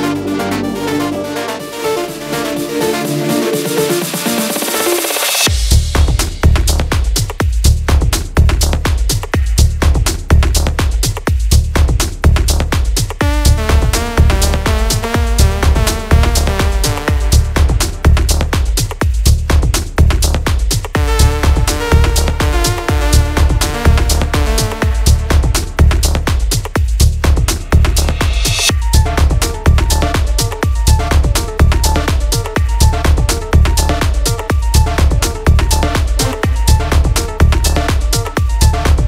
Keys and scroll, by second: 2.7-6.1 space, 10.6 space, 14.5 space, 14.7 space, 16.3 space, 32.5 ctrl++, 32.6 ctrl++, 32.9 ctrl++, 32.9-34.3 space.